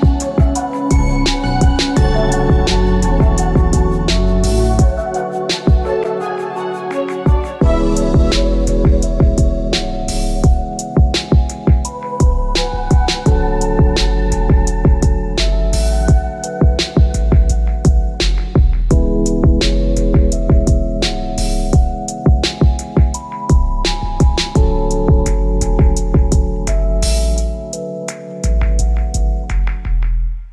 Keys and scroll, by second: 2.8 Return, 25.4 Return.